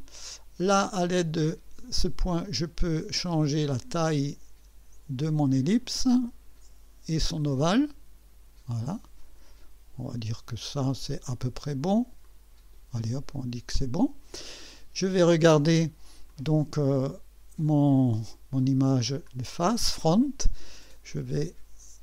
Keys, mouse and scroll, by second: 0.9-5.6 drag, 7.3-10.8 drag, 12.2 click, 13.7 click, 16.3-17.7 drag, 19.2 click, 21.1 click.